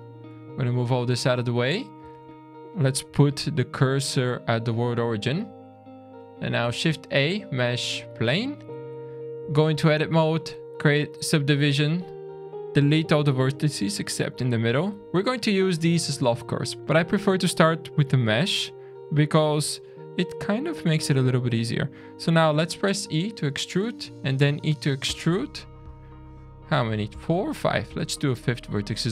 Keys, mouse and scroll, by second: 0.3 g, 1.4-2.0 scroll up 3, 2.1 shift+a, 3.2 shift+s, 5.2 scroll down 2, 5.7 middle click, 5.9-6.6 scroll up 3, 6.8 shift+a, 8.2-8.6 scroll up 3, 8.7 Tab, 9.8 ctrl+r, 10.6 shift+click, 11.6 click, 14.9 x, 15.0 click, 15.0 middle click, 15.0-16.1 scroll down 2, 16.8 middle click, 17.2 middle click, 18.1 middle click, 19.6 g, 22.8 e, 23.9 e, 25.2 middle click, 25.6-27.6 scroll down 2, 27.6 middle click, 28.0 e, 28.8 scroll down 2.